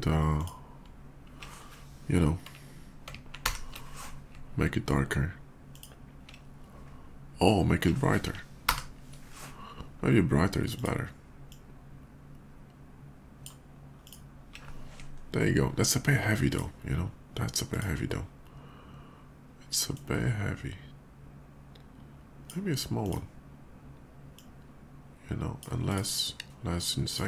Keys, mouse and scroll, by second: 0.1 click, 3.2 alt+Delete, 5.5 alt+click, 8.4 ctrl+Delete, 10.4 click, 11.2-13.2 drag, 13.7 click, 15.0 alt+middle click, 15.6 alt+middle click, 15.6 scroll up 2, 15.7 alt+middle click, 16.2 alt+click, 17.5 alt+click, 19.7-22.3 drag, 22.7 click, 24.1-25.4 drag, 25.7 click, 26.9 click.